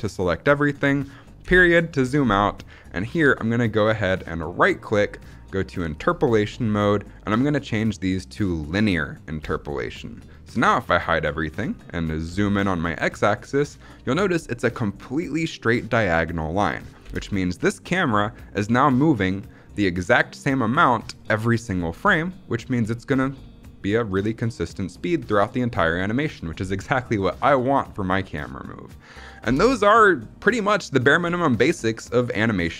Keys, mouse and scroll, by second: 1.3 KP_Decimal, 4.3-8.6 right drag, 10.7 drag, 12.1 KP_Decimal, 16.9 space, 17.5 space, 17.9-21.5 drag, 21.9 space, 29.3 space.